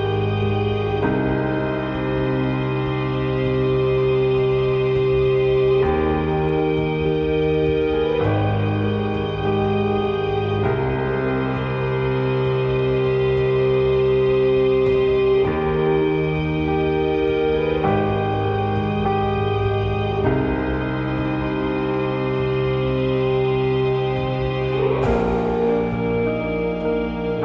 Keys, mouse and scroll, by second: 8.3-9.9 drag, 9.9-11.8 middle drag, 16.1-27.4 drag.